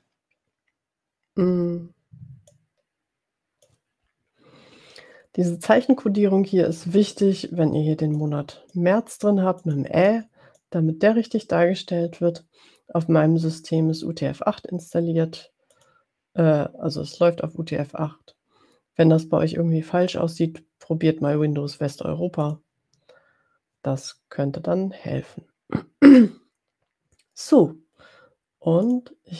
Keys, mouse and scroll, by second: 2.7-3.8 drag, 8.2 click, 9.8 click, 10.1 click, 16.0 click, 22.5 click, 28.8 click.